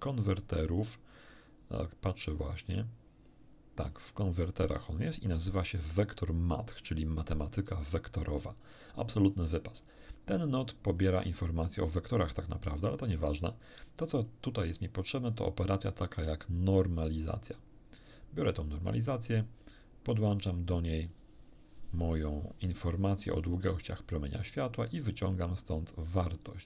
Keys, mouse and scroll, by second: 9.8 click, 10.9 click, 14.1 click, 17.1 click, 18.8-19.8 drag, 20.5-21.3 drag, 22.2-23.3 drag, 25.1-26.6 drag.